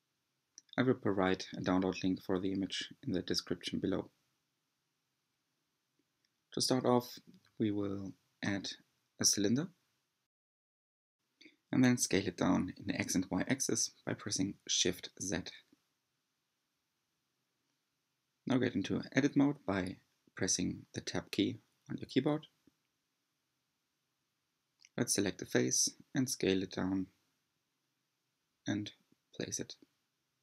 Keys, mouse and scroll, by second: 2.2 r, 6.5 g, 7.8 middle click, 7.8-8.6 scroll down 3, 8.6 click, 9.2 shift+a, 12.2 s, 16.5-16.9 scroll up 2, 18.8-19.2 middle drag, 19.2 3, 19.4 click, 20.2 Tab, 20.4 3, 20.7 click, 22.6 alt+z, 23.2 s, 26.0 g, 27.5 s, 29.5 g.